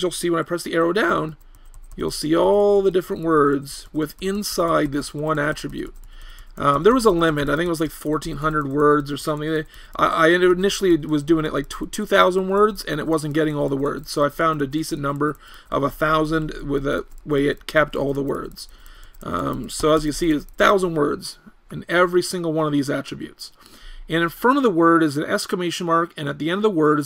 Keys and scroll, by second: 0.7 Down, 1.0 Down, 1.3 Down, 1.6 Down, 1.8-4.5 typing, 4.7 Down, 4.8 Down, 5.0 Down, 5.2 Down, 5.4 Down, 5.5 Down, 5.7 Down, 5.9 Down, 6.0 Down, 6.2 Down, 6.4 Down, 6.6 Down, 6.8 Down, 6.9 Down, 7.1 Down, 7.3 Down, 7.5-14.2 typing, 7.6 Down, 7.8 Down, 13.3 Down, 13.5 Down, 13.8 Down, 14.0 Down, 14.4 Down, 14.8 Down, 15.0 Down, 15.4-15.8 typing, 16.0 Down, 16.1 Down, 16.3 Down, 16.4 Down, 16.6 Down, 17.0-18.8 typing, 17.6 Down, 18.2 Down, 18.6 Down, 18.9 Down, 19.4 Down, 20.0 Down, 20.6 Down.